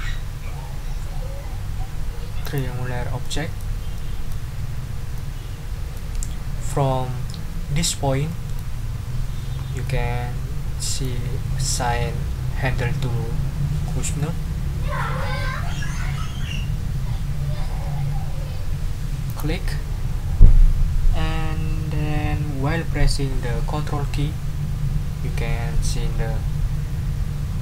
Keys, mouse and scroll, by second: 2.4 click, 3.2-3.7 scroll up 1, 3.9-4.5 scroll up 1, 5.1 scroll up 1, 9.0-9.7 ctrl+scroll up 4, 9.8 ctrl+middle click, 10.7-11.2 ctrl+scroll up 1, 19.3 click.